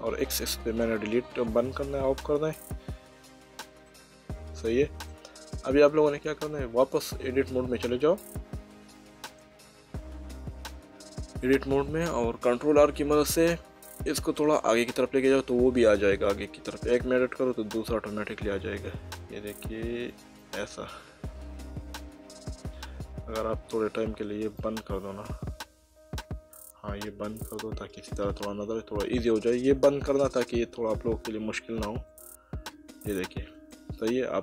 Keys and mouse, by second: 0.0 click, 3.9 middle click, 7.4 Tab, 9.2 middle click, 12.8 ctrl+r, 13.9 click, 20.4 click, 24.6 click, 27.0 middle click, 32.1 middle click.